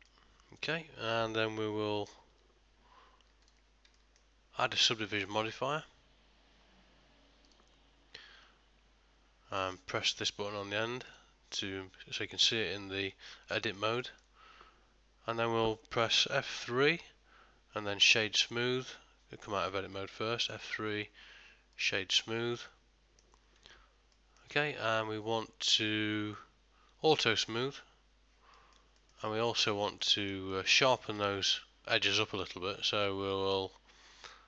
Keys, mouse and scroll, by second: 0.1 middle click, 2.4 2, 3.5 alt+click, 4.0 ctrl+middle click, 5.3 click, 11.2 click, 13.2 middle click, 13.7 ctrl+middle click, 14.1 shift+middle click, 17.0 F3, 18.9 Tab, 20.6 F3, 22.6 middle click, 23.6 Tab, 24.2 middle click, 25.8 click, 28.6 middle click, 29.1 ctrl+middle click, 29.5 Tab, 30.1 middle click, 30.6 ctrl+middle click, 31.3 shift+middle click, 32.2 middle click.